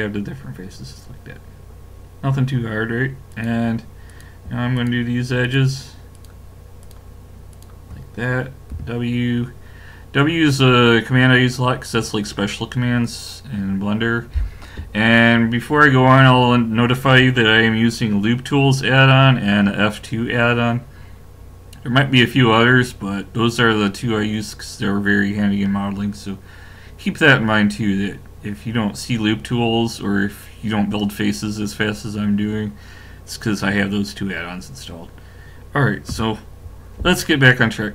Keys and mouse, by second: 3.3-9.4 drag, 8.7 w, 36.1 w.